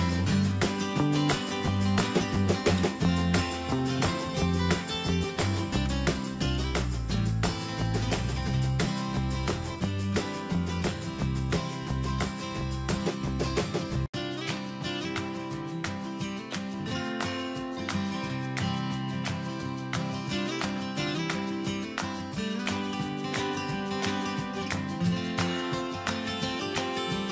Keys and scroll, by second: 2.8 ctrl+Return, 10.5 Return, 17.9 ctrl+a, 23.4 ctrl+Return, 25.3 ctrl+a.